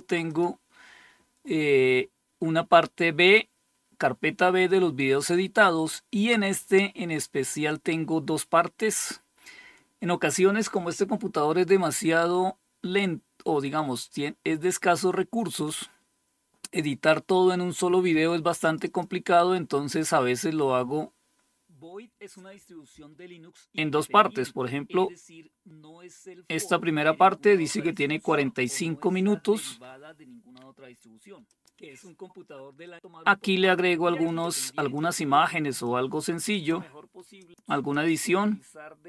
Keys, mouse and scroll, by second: 18.0 click, 30.9 click, 32.4 click, 33.0 click, 33.7 click, 34.4 click, 35.1-37.6 drag, 38.9 click.